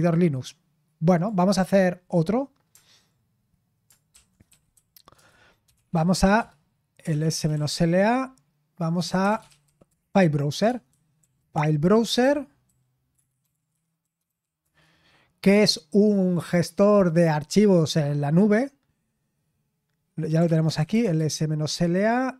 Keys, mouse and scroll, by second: 1.1 click, 5.7-14.7 typing, 15.8-16.5 typing, 21.1 typing.